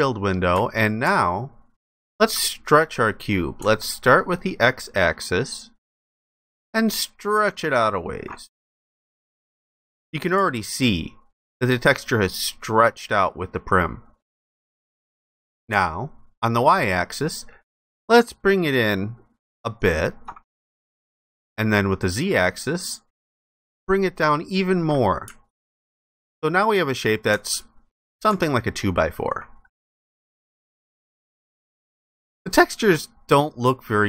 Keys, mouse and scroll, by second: 1.2 ctrl+alt+click, 6.1 ctrl+shift+click, 8.9 alt+click, 10.7 ctrl+alt+click, 17.5 ctrl+shift+click, 22.4 ctrl+shift+click, 25.6 alt+click, 29.9 ctrl+alt+click.